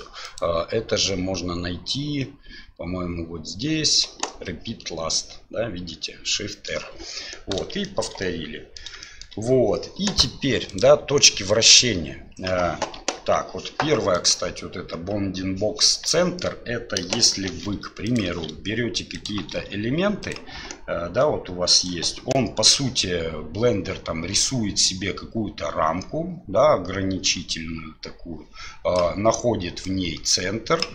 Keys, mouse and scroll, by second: 0.2-6.8 drag, 8.0 shift+middle click, 8.3-8.8 middle drag, 9.1 shift+middle click, 10.7 click, 13.1 KP_1, 14.2-15.7 drag, 16.2 shift+middle drag, 17.5 shift+d, 18.3 shift+d, 19.4 shift+d, 21.2 right click, 24.3 d, 24.5-28.9 drag, 29.0-30.9 d, 29.8 click.